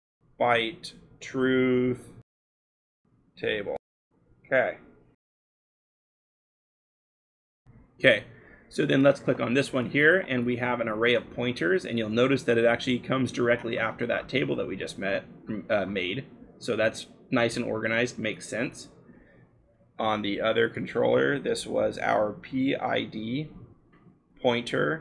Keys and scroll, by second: 0.0-4.5 typing, 5.8 scroll, 11.3-12.6 scroll, 19.7 l, 22.3-25.0 typing.